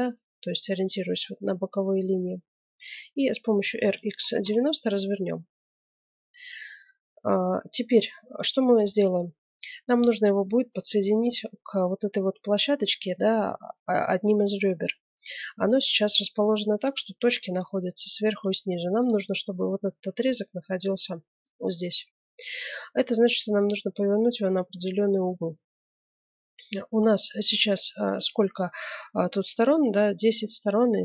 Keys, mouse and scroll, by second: 3.6 r.